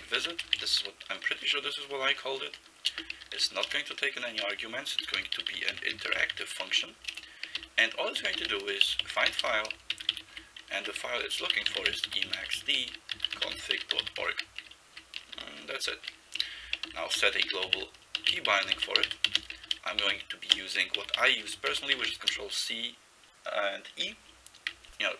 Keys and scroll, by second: 0.0-1.3 typing, 2.9-22.6 typing, 10.3 Left, 14.9 Right, 24.1 e.